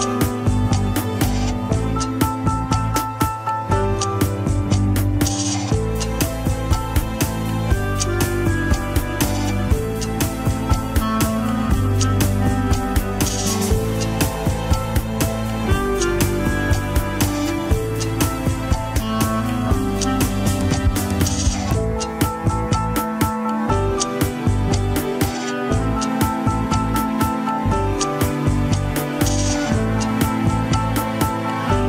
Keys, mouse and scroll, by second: 0.2 alt+z, 0.5 click, 0.7 alt+z, 1.0 KP_3, 1.6 click, 2.0 KP_1, 2.1 scroll down 3, 2.5-3.5 shift+middle drag, 3.5 alt+z, 4.0 click, 4.2 alt+z, 4.8 g, 5.6 click, 6.0 g, 7.3 alt+z, 7.7 click, 7.9 alt+z, 8.1 g, 9.0 alt+z, 9.5 click, 9.8 alt+z, 10.1 g, 10.6 alt+z, 11.0 click, 11.2 alt+z, 11.5 g, 12.3 scroll down 1, 12.6 alt+z, 13.0 click, 13.5 alt+z, 13.8 g, 14.3 alt+z, 14.5 click, 14.8 alt+z, 14.9 g, 15.5 alt+z, 15.8 click, 16.0 alt+z, 16.3 g, 17.0-17.3 scroll down 2, 17.3 ctrl+Tab, 18.1 ctrl+s, 18.4-20.4 middle drag, 20.9 KP_1, 21.0 scroll up 3, 21.3 Tab, 21.8 middle click, 22.1 alt+z, 22.4 click, 22.7 alt+z, 23.0 middle click, 23.7 click, 24.0 s, 24.7 KP_1, 24.9 scroll up 1, 25.1 g, 25.9-26.6 scroll down 5, 26.6 ctrl+s, 28.4 scroll up 3, 29.2 click, 30.8-31.8 scroll down 1.